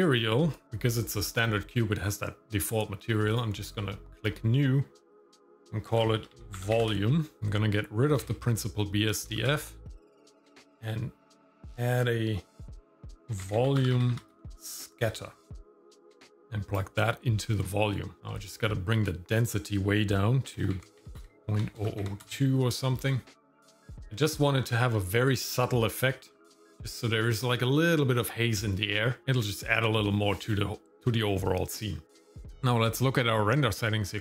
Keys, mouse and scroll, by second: 0.0 click, 3.3 click, 5.1-7.4 drag, 8.2 x, 9.4 shift+a, 15.2 BackSpace, 15.3 BackSpace, 15.5 BackSpace, 16.3 click, 18.1 scroll up 2, 18.2 shift+middle click, 19.3-21.2 drag, 21.4 click, 23.9 KP_0, 26.1 click.